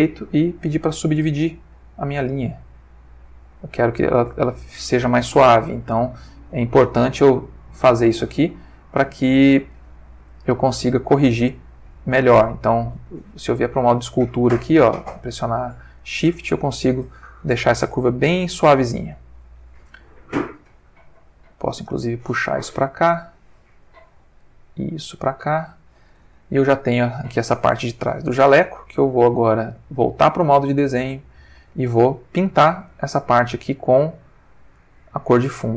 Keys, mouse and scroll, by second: 1.0 click, 2.1-4.7 drag, 6.6 click, 8.5-9.7 ctrl+middle drag, 9.7 ctrl+Tab, 12.1 ctrl+Tab, 13.1 click, 13.6-14.9 shift+drag, 15.1-15.8 shift+drag, 16.0-16.4 shift+drag, 17.2-17.8 ctrl+middle drag, 20.2 f, 20.5 click, 21.0-23.7 drag, 24.4-25.9 drag, 26.3 ctrl+middle click, 29.3 ctrl+Tab, 30.0 click, 31.2 click, 32.9 click, 34.7 click.